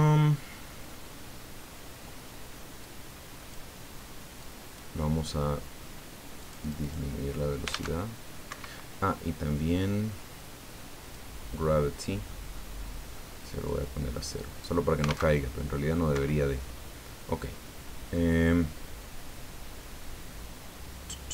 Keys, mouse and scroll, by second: 2.8 click, 4.4 click, 6.4 click, 8.4 Escape, 9.0-9.6 scroll down 2, 11.0 click, 12.2-12.8 scroll down 5, 13.6-14.8 drag, 15.1 alt+a, 16.1 Escape, 20.7-21.2 scroll up 2.